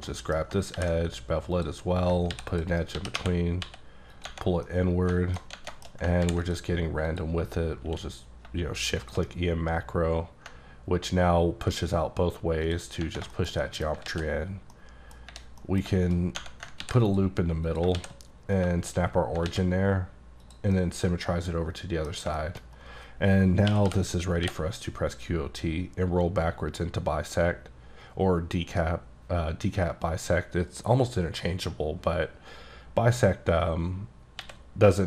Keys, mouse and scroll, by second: 0.1 middle click, 0.4 scroll up 2, 0.7 ctrl+b, 1.6 click, 2.3 ctrl+r, 2.5 ctrl+click, 3.0 g, 3.2 y, 3.6 x, 4.1 click, 4.4 scroll down 3, 4.7 middle click, 5.1 alt+middle click, 5.7 shift+middle click, 5.9 scroll up 3, 6.2 ctrl+r, 6.4 click, 7.1 click, 7.6-7.9 scroll up 1, 7.9 q, 9.0 shift+click, 10.5 ctrl+click, 12.7 click, 12.9 scroll down 2, 13.3 shift+middle click, 14.1 alt+x, 14.6 scroll down 1, 14.7 middle click, 15.6 middle click, 16.4 Tab, 16.8 ctrl+r, 17.0 click, 17.7 click, 18.0 s, 19.5 alt+x, 20.4 click, 20.8 middle click, 22.2-23.7 scroll down 3, 22.4 shift+middle click, 22.6 middle click, 23.7-24.4 typing, 26.1-26.7 scroll down 1, 34.4 x.